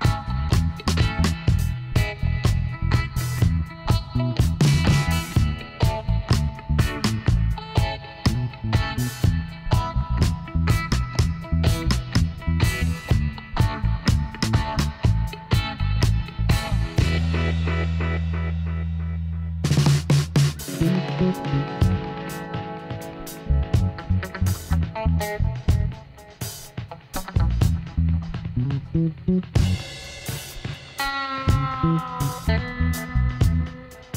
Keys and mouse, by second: 2.6-4.4 drag, 3.4-6.4 right drag, 6.4-10.2 middle drag, 10.2-12.0 right drag, 11.2 l, 12.4 h, 14.0 middle click, 14.3 KP_1, 14.6 middle click, 15.5 middle click, 17.7-19.3 drag, 18.9-20.4 right drag, 20.4 c, 25.9 x, 28.6 middle click, 30.2 z, 31.9 z, 33.6 alt+h.